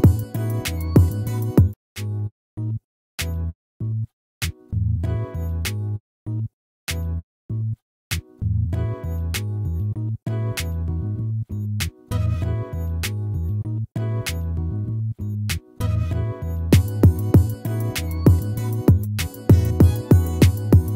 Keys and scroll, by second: 3.2 ctrl++, 4.4 ctrl+-, 15.2 ctrl++.